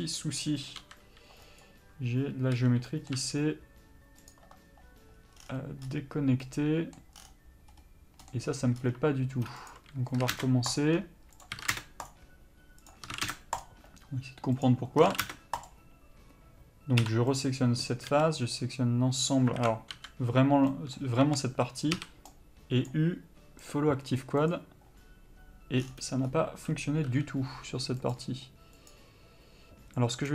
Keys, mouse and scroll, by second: 2.7 l, 3.0 middle click, 3.3 u, 9.1 2, 9.9 click, 10.4 s, 10.9 click, 11.7 s, 12.2 click, 13.2 s, 13.8 click, 15.2 s, 15.8 click, 17.2 3, 17.5 click, 18.2 a, 19.8 alt+a, 20.1 l, 20.9 middle click, 24.7 u.